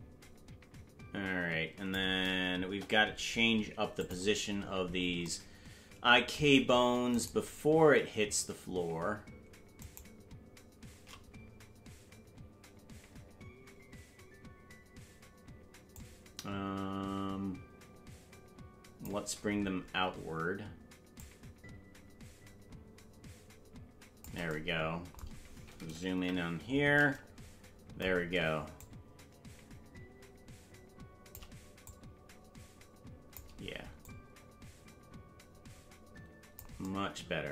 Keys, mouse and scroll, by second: 2.6 KP_0, 3.9 click, 7.4 right click, 10.1 shift+right click, 15.9 click, 21.2-24.2 shift+drag, 26.1 KP_Decimal, 26.6-27.0 scroll down 4, 28.7-31.4 shift+drag, 31.8-33.4 drag, 34.0-36.6 drag.